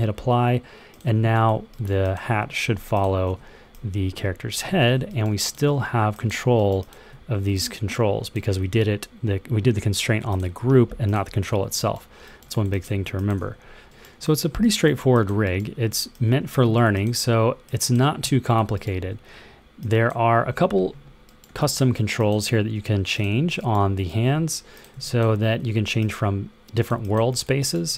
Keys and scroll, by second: 3.1 e, 4.6 super+z, 5.5 w, 8.3 super+z, 13.3 w.